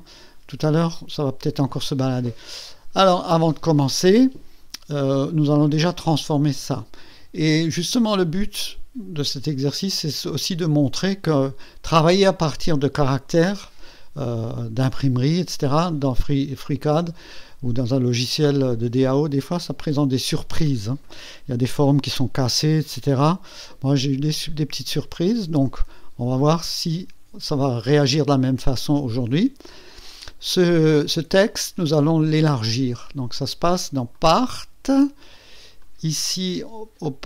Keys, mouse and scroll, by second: 10.3 click, 21.7 right click, 23.5 Escape, 33.3 click, 34.1 click, 35.8 click, 37.0 click.